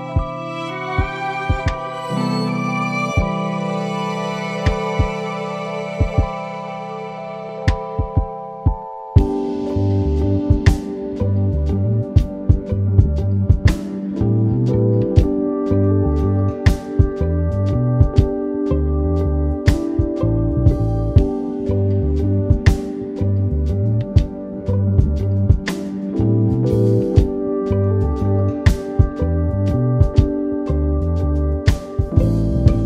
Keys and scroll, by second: 2.3 super+s, 2.4 super+-, 6.8 ], 7.7 super+-, 7.9 super+t, 12.6 Return, 12.8 super+-, 13.6 super+t, 14.0 Return, 21.1 super+t, 23.1 Return, 26.1 [, 29.1 ], 30.9 super+-.